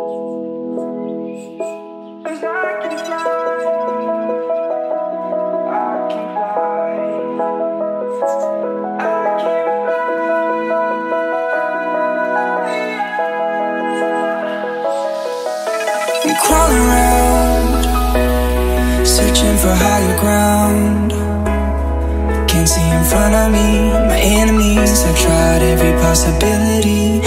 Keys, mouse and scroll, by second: 0.1 click, 5.8-7.0 typing, 8.1 click, 9.8 F10, 11.0-12.9 drag, 16.2 right click, 17.7 click, 24.5 F10, 25.6 click, 26.1 right click.